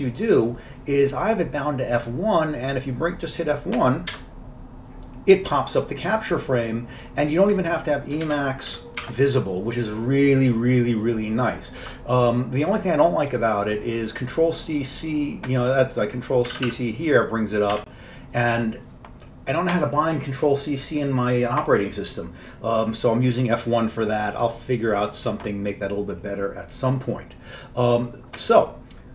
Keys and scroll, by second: 4.3 F1, 7.5 q, 8.3 ctrl+x, 8.8 5, 9.1 0, 16.6 ctrl+c, 17.8 q.